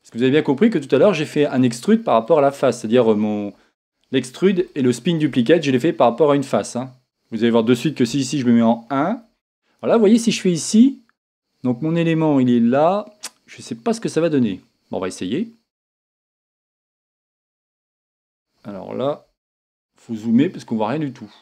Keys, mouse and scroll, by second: 0.1 click, 0.6 scroll down 1, 1.6-15.4 middle drag, 2.5 scroll down 1, 6.8 scroll up 1, 8.1 KP_1, 8.8 scroll down 1, 15.4-18.5 drag, 19.7 scroll up 1.